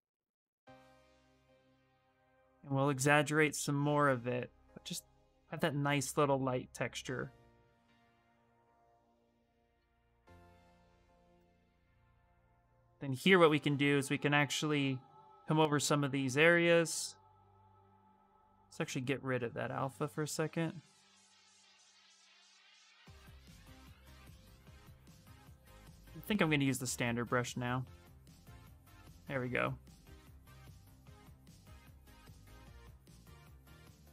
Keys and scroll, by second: 10.8 s, 11.2 ctrl+z, 11.4 ctrl+z, 12.3 s, 14.6 space, 18.0 ctrl+z, 24.1 s, 25.4-26.7 typing.